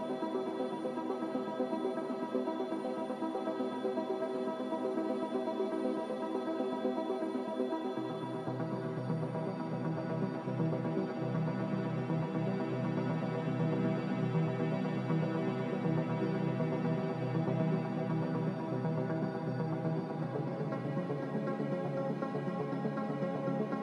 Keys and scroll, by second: 7.6-8.5 typing, 13.5 ctrl+z, 17.3-18.1 typing, 22.0-23.3 typing.